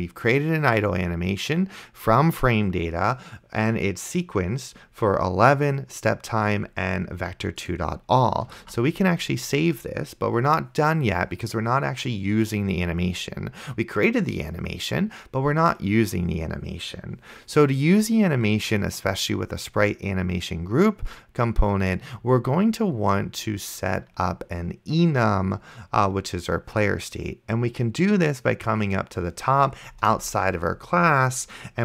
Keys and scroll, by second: 8.8 ctrl+s, 30.2 Return.